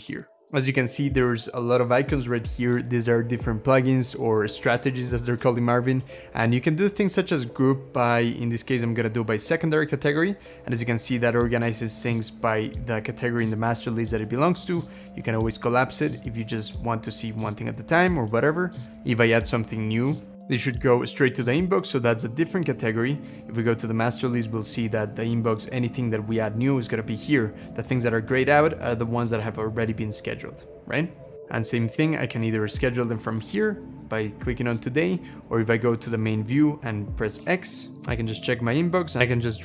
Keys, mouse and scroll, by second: 7.7 scroll down 1, 10.0 scroll down 1, 18.9-19.5 scroll up 3, 20.3 typing, 20.4 Return, 21.5 scroll down 2, 22.4 scroll up 2, 37.2 x.